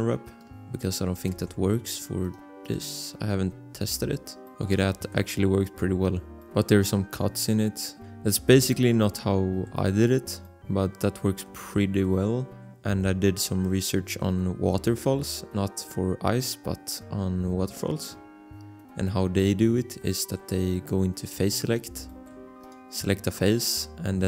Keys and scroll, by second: 1.5 ctrl+s.